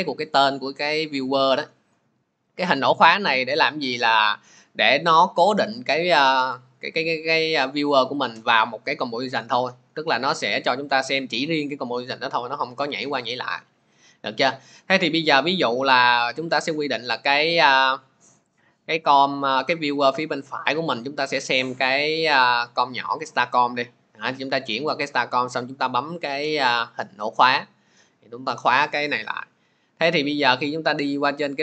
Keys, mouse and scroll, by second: 2.8 click, 16.8-31.6 drag.